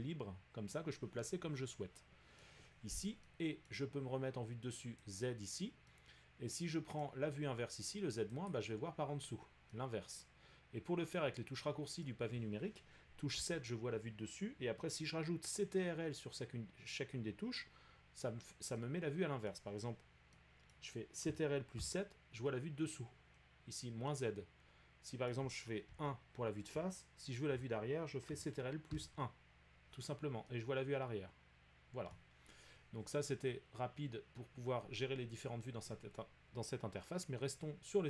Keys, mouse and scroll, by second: 1.3-1.6 middle drag, 2.4 middle click, 3.7 middle click, 5.1 click, 7.0 middle click, 8.5 click, 12.0 middle click, 13.3-17.1 middle drag, 13.3 KP_7, 19.5 middle click, 20.7 middle click, 21.8 ctrl+7, 24.1-24.7 scroll, 25.3 middle click, 25.9 1, 32.1-37.3 middle drag.